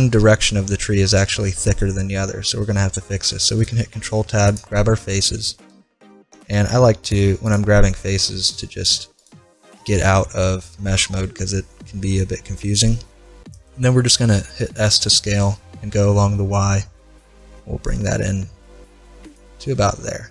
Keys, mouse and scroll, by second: 3.7 ctrl+Tab, 6.5 z, 7.1 right click, 10.9-14.6 middle drag, 14.9 s, 19.9-20.3 middle drag.